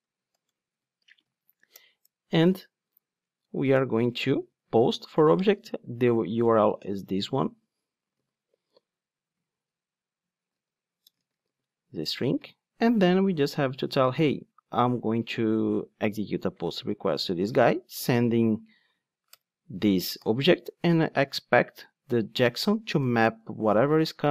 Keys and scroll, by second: 1.7 alt+Return, 5.0 Return, 7.2 super+c, 8.1 super+v, 10.5 super+z, 11.4 super+v, 19.3 Return.